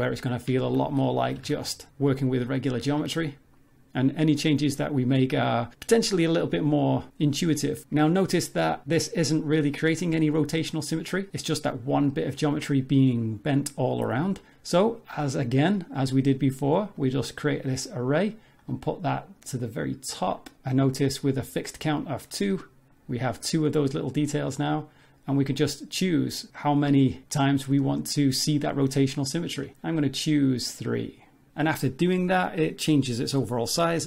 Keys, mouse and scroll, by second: 0.0 click, 0.6 shift+click, 0.9 middle click, 1.4 g, 7.9 Tab, 8.9 middle click, 9.4-10.3 scroll down 2, 9.6 middle click, 11.3 middle click, 12.1 middle click, 12.5-14.4 scroll up 1, 16.0 click, 18.6 click, 19.6 click, 20.2 click, 22.2 scroll down 2, 22.5 middle click, 24.1 middle click, 25.3 click, 25.9 click, 26.5 click, 27.3 click, 27.7 click, 28.7 middle click, 29.6 scroll up 1, 31.5 Tab, 32.4 a, 33.2-33.7 scroll up 2, 33.7 s.